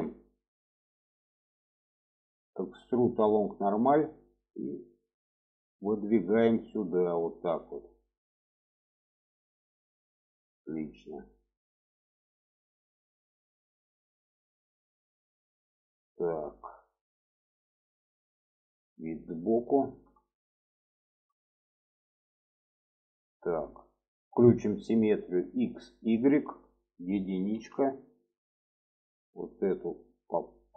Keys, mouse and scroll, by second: 8.2 click, 8.8 shift+middle click, 10.1-10.4 shift+middle drag, 11.0 shift+middle drag, 12.1-13.2 middle drag, 13.5 middle click, 14.7 middle click, 15.7 middle click, 16.6 middle click, 17.6-18.8 middle drag, 19.1 alt+middle click, 20.0 shift+middle click, 20.7 shift+middle click, 22.2 click, 22.9 shift+middle click, 25.0 click, 25.6 click, 26.1 shift+middle click, 27.3 1, 27.9 click, 28.6 click, 30.2 click.